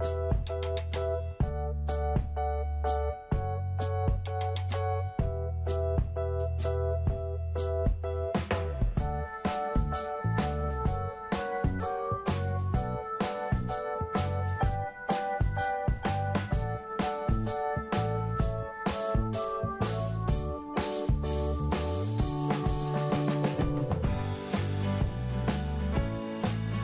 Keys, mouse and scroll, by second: 3.8-8.0 scroll down 1, 10.0-10.4 scroll up 1, 10.4-11.7 scroll down 1, 11.7 click, 12.9-13.2 typing, 13.6 Return, 14.9 click, 15.8-16.4 scroll up 1, 16.4 middle click, 17.4-18.1 scroll up 1, 18.1 scroll down 1, 19.2 click.